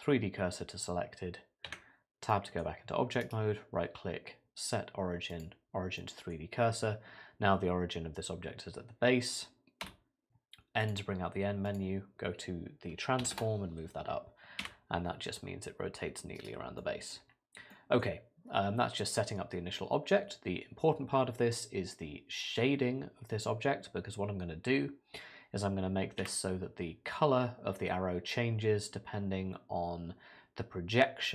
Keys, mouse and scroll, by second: 1.7 Tab, 2.3 middle click, 3.2 right click, 6.0 middle click, 9.8 n, 10.8 click, 11.7 click, 14.6 r, 16.8 middle click, 17.2 scroll down 3, 17.7 middle click, 26.2 r.